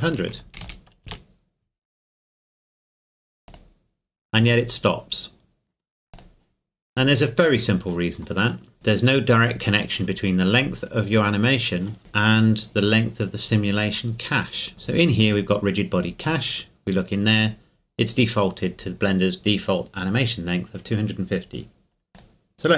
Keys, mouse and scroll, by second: 0.0 KP_5, 0.4 KP_0, 1.0 KP_Enter, 2.5 scroll down 1, 3.5 click, 6.1 click, 8.3 click, 10.7 scroll down 1, 16.2 click, 22.1 click.